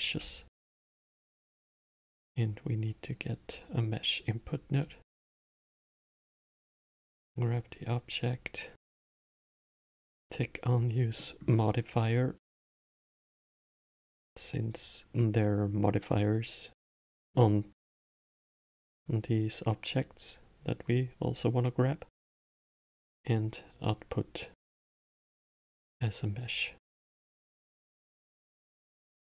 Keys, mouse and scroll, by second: 0.8 shift+a, 5.7-6.5 middle drag, 6.5 drag, 10.5 click, 11.5 middle click, 12.3 click, 13.7 click, 17.4 click, 21.6 click, 25.1 click, 25.7-27.3 drag, 28.6 middle click, 29.0 scroll down 5.